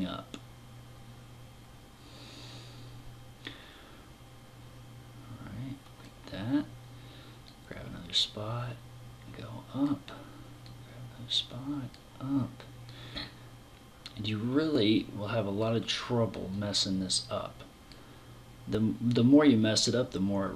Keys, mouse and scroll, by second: 6.9 click, 10.1 click, 12.3 click, 15.9 click, 19.2 click.